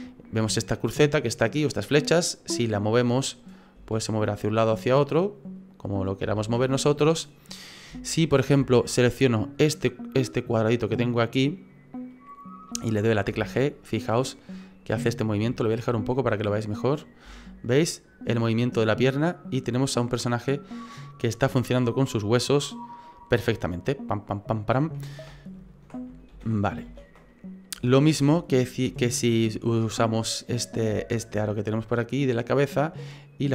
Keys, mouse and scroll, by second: 0.4 middle click, 2.2 right click, 3.7 g, 6.4 ctrl+z, 6.8 middle click, 7.3-7.9 scroll up 5, 8.0 shift+middle click, 8.4 scroll up 2, 8.7 shift+middle click, 9.1 middle click, 10.4 right click, 10.8 middle click, 11.2-12.1 scroll down 1, 12.1 middle click, 12.1-12.6 scroll down 2, 12.7 middle click, 13.3 g, 15.5 shift+middle click, 15.9-17.2 scroll down 3, 17.2 g, 26.3 ctrl+z, 26.9 ctrl+z, 27.3 middle click, 27.9 shift+middle click, 28.5 middle click, 29.0 shift+middle click, 29.4 middle click, 30.6 right click, 31.0 middle click, 32.3 click, 33.4 click.